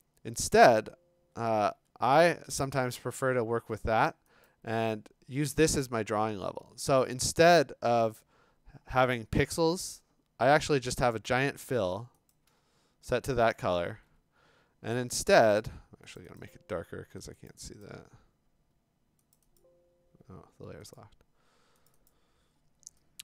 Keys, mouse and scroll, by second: 0.5 click, 0.8 click, 1.9 Escape, 2.9 click, 4.5 click, 12.3 click, 13.1 ctrl+i, 13.9 ctrl+i, 16.2 click, 16.4 click, 17.5 click, 17.8 click, 19.4 click, 19.6 click, 20.3 Escape, 21.0 click, 21.9 click, 22.1 click.